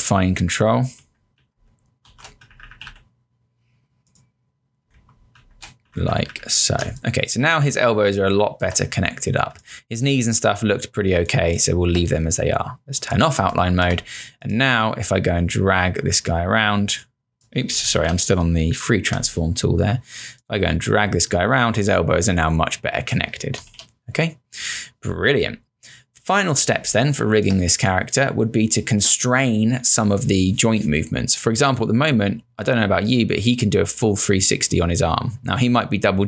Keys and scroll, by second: 1.0 Left, 1.7 Down, 2.1 Right, 2.5 Up, 5.0 shift+Down, 6.8 space, 10.7 space, 18.0 z, 23.7 ctrl+z, 26.8 space.